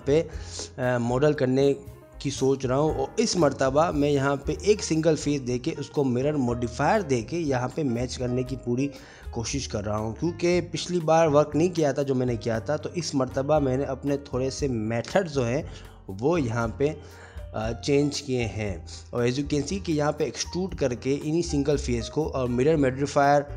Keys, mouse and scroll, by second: 0.2 shift+middle click, 0.6 shift+middle click, 1.0 middle click, 1.5 middle click, 1.5 click, 1.7 click, 3.2 click, 4.6 click, 5.1 Tab, 5.2 click, 5.5 click, 5.5 2, 5.5 shift+click, 5.9 middle click, 5.9 g, 6.4 e, 7.4 click, 7.7 middle click, 7.7 g, 8.5 middle click, 8.7 1, 8.7 click, 9.0 shift+click, 9.7 middle click, 9.9 shift+click, 10.1 shift+click, 10.1 shift+2, 10.3 shift+click, 10.4 shift+click, 10.6 shift+click, 10.7 shift+click, 11.0 middle click, 11.1 shift+click, 11.2 shift+click, 11.3 shift+click, 11.5 shift+click, 12.0 click, 12.0 middle click, 12.4 middle click, 13.5 g, 17.0 click, 17.1 ctrl+r, 17.5 middle click, 17.7 1, 17.8 click, 18.2 click, 18.3 g, 21.4 click, 21.6 g, 22.1 shift+click, 22.2 middle click, 22.5 g, 23.2 middle click.